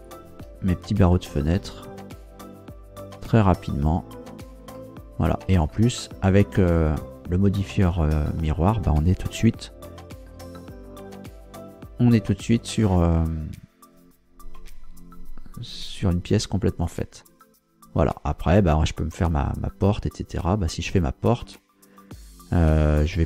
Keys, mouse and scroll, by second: 1.6 f, 2.4-3.4 scroll down 4, 4.7-8.6 shift+middle drag, 9.2 KP_0, 9.9 scroll up 1, 10.2-11.4 scroll down 4, 11.8-12.3 scroll up 4, 14.6 Tab, 17.4 scroll down 2, 17.6-18.1 scroll up 2, 21.4 Tab.